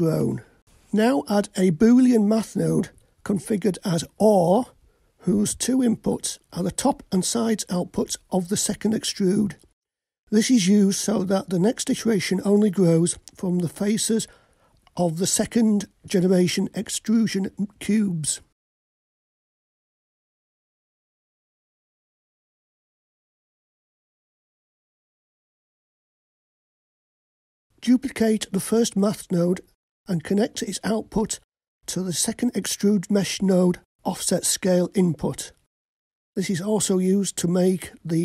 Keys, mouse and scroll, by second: 0.6 click, 1.6-2.5 middle drag, 3.2 click, 4.0-5.6 drag, 6.7-8.4 drag, 9.0-19.9 drag, 11.3 o, 21.7 click, 21.9-23.4 drag, 24.5-26.8 drag, 27.7 middle click, 27.7 click, 29.8 shift+d, 32.4-32.9 drag, 33.8-35.7 drag.